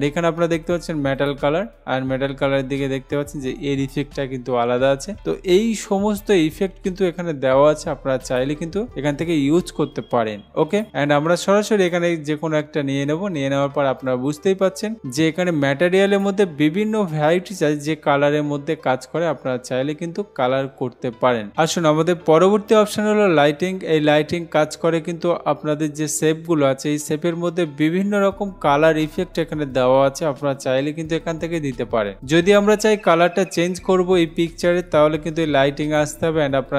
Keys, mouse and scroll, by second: 1.4 click, 6.0 click, 8.5 click, 10.9 click, 12.1 click, 16.4 click, 36.1 click.